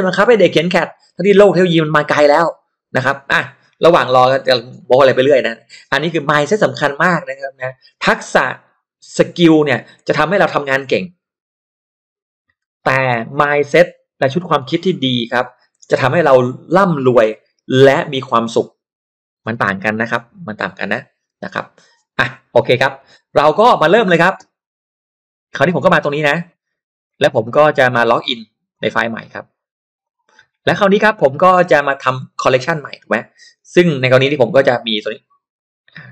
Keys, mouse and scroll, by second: 23.5 middle click, 23.5 scroll up 1, 25.6 click, 27.0 click, 28.7 click, 30.0-32.0 drag, 32.3 click, 33.8 click, 34.8 click, 35.5 click, 35.8 click.